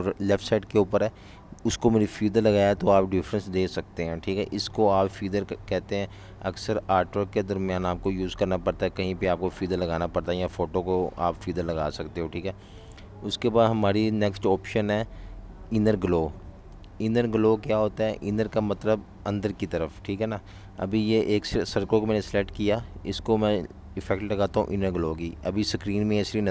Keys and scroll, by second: 0.0 super+-, 1.1 v, 1.2 space, 2.8 -, 3.8 Delete, 4.8 super+-, 5.2 v, 6.3 BackSpace, 24.7 z.